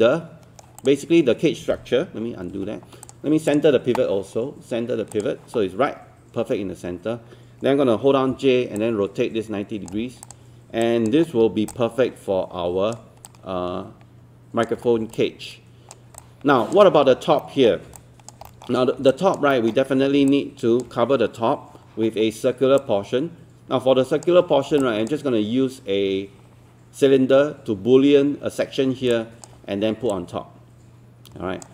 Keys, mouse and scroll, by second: 0.8 click, 2.5 ctrl+z, 3.0-6.2 drag, 8.3-10.7 typing, 8.8 click, 9.1 click, 10.2 click, 10.8 alt+click, 11.2-11.7 scroll up 2, 11.7 alt+click, 13.2 alt+click, 14.9 scroll down 1, 15.2 alt+click, 16.2 alt+click, 17.4 alt+middle click, 18.0 alt+click, 18.5 alt+middle click, 19.1 alt+click, 19.5 alt+middle click, 20.3 alt+click, 22.8-24.3 alt+drag, 24.9 alt+click, 29.1 alt+click, 30.1 alt+click.